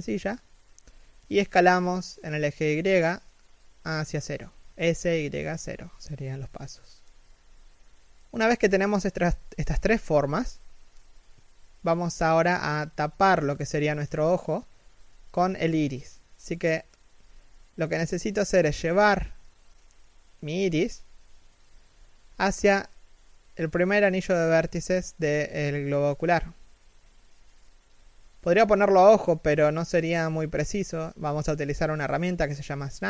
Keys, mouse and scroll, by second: 6.0 middle click, 6.9 z, 7.1 middle click, 7.8 z, 8.0 middle click, 10.3 3, 10.8 z, 11.8 shift+middle click, 14.7 a, 21.0 g, 25.0-25.8 scroll up 1, 25.8 shift+middle click, 27.9 shift+middle click, 28.6-29.4 scroll down 1, 29.4 shift+middle click.